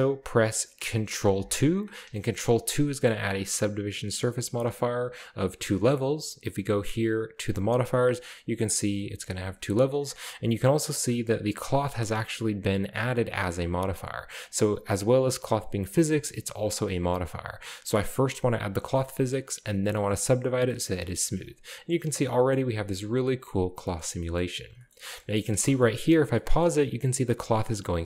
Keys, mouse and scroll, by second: 1.5 ctrl+2, 2.1-3.8 middle drag, 3.2-4.0 scroll up 1, 4.6-5.5 middle drag, 4.6-5.5 scroll up 1, 7.5-8.2 drag, 8.3 click, 10.7 click, 14.4 click, 15.1 click, 16.7 drag, 17.1 click, 17.9 click, 20.1-20.8 drag, 20.9-21.2 middle drag, 21.7 space, 22.6 middle drag, 22.9-23.6 scroll down 1, 23.6 middle drag, 23.6-24.6 scroll up 1, 25.4-26.8 scroll up 2, 26.0-27.4 shift+middle drag, 27.9-28.0 scroll down 2.